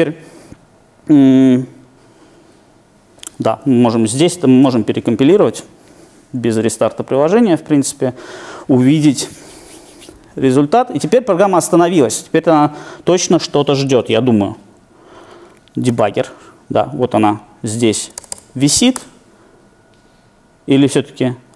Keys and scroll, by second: 4.3 shift+super+F9, 14.0 super+e, 15.9 Left.